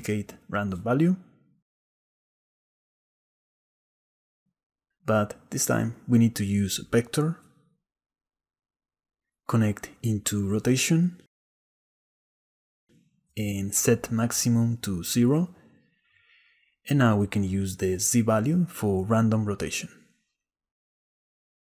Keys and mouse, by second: 1.1 shift+a, 3.2 shift+d, 5.8-7.8 drag, 9.1 click, 10.1 click, 11.2-12.2 drag, 12.8 ctrl+z, 14.3-16.5 drag, 18.4 middle click, 19.6-20.6 shift+drag, 20.6-21.6 shift+middle drag.